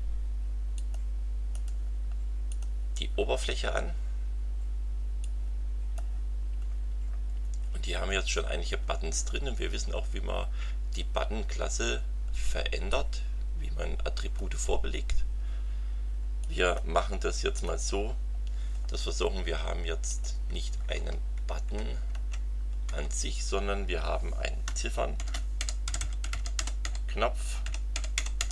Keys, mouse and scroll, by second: 0.7 click, 1.5 right click, 2.5 click, 5.2 click, 6.7 scroll up 2, 7.2-7.7 scroll down 4, 7.7-8.1 scroll up 2, 8.9-9.2 scroll up 2, 12.9-14.5 drag, 16.4 click, 17.5 click, 18.8 scroll up 1, 20.1 click, 20.6 Up, 22.1 Return, 22.9 Right, 24.9-28.5 typing.